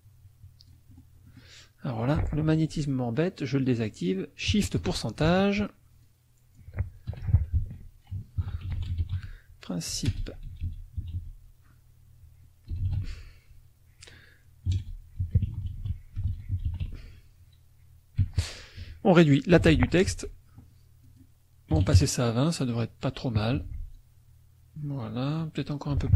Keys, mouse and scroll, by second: 1.3 middle click, 4.9 shift+click, 6.0 click, 7.1 t, 7.6 ctrl+a, 8.1 ctrl+shift+a, 8.2-18.2 typing, 18.8 F1, 19.6 t, 20.1 ctrl+a, 21.0 click, 21.7 KP_2, 21.8 KP_0, 21.9 KP_Enter, 23.5 F1, 23.9-25.5 drag, 25.9 t.